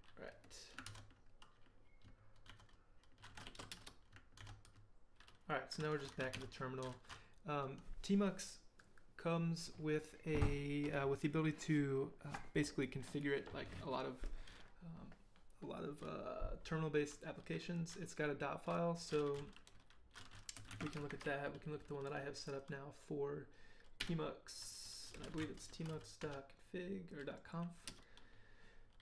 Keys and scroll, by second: 0.9 ctrl+d, 2.5 ctrl+d, 3.3-4.1 typing, 4.7 ctrl+d, 6.3 ctrl+l, 20.3-21.7 typing, 24.0-26.4 typing, 27.9 Return.